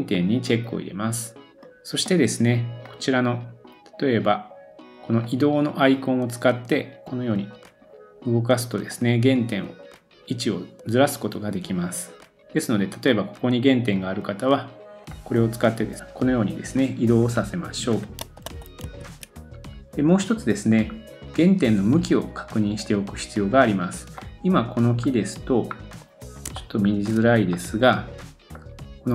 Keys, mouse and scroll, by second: 18.2 super+z, 18.4 super+z, 20.5-20.8 scroll down 1, 20.8-21.3 scroll up 2, 21.7-22.1 scroll down 1, 22.1 scroll down 1, 24.2 middle click, 24.9 scroll up 2, 25.7-26.5 scroll down 1, 26.5-27.0 shift+middle drag, 27.5 scroll up 1, 27.7 middle click.